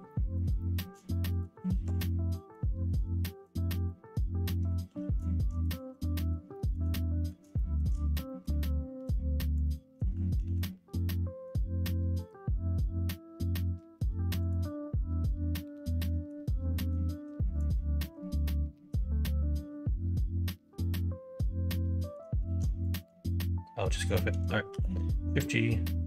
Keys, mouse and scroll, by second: 0.0 middle click, 0.5 middle click, 1.2 shift+click, 1.6 alt+z, 2.0 middle click, 3.4 shift+click, 3.8 middle click, 4.8 ctrl+z, 5.6 click, 5.9 middle click, 6.5 shift+middle click, 7.1 middle click, 7.5 middle click, 8.2 middle click, 9.5 shift+click, 10.3 ctrl+e, 15.9 middle click, 16.6 middle click, 17.3 middle click, 18.7 middle click, 19.4-22.1 middle drag, 22.4 alt+z, 23.0 middle click, 24.6 shift+g.